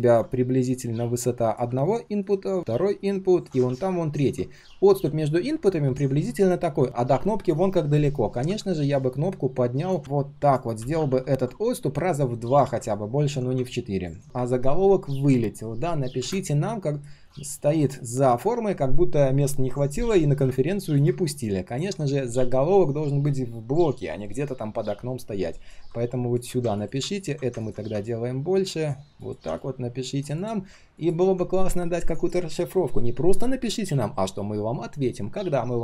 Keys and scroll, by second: 2.6 ctrl+z, 3.6 ctrl+d, 10.0 ctrl+z.